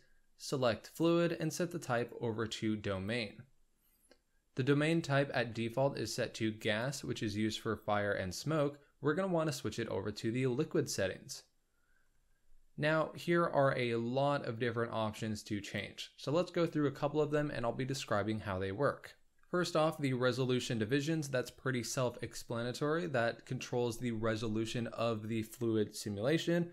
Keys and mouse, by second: 0.9 click, 2.0-3.0 drag, 6.6-10.9 drag, 13.7-15.7 drag.